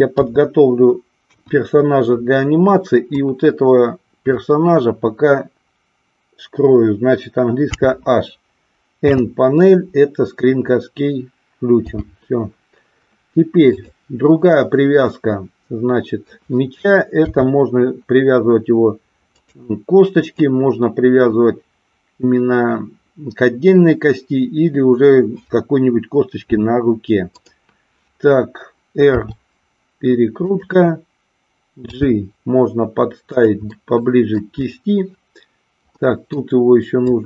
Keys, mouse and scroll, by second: 0.1 KP_3, 1.2 KP_1, 3.1-4.4 drag, 7.5 h, 13.8 click, 14.4-16.3 middle drag, 17.3 r, 19.4 click, 20.3-27.5 drag, 29.1 r, 30.4 click, 31.9 g, 33.3 click, 33.7 middle click, 35.9 middle click, 37.1-37.2 drag.